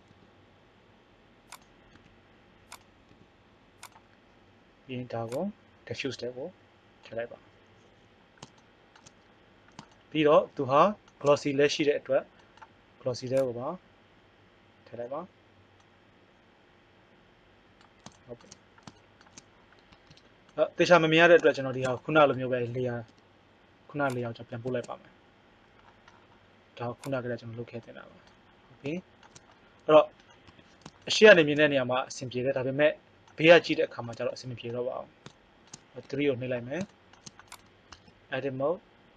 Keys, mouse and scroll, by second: 0.1 g, 1.9 s, 3.1 g, 5.3-7.1 drag, 8.3-10.0 middle drag, 13.4-14.5 drag, 15.8 middle click, 19.9 Tab, 23.1 m, 27.0-28.8 middle drag, 30.5 KP_1, 32.7 middle click, 36.1 KP_3, 37.5 right click, 37.9 Tab.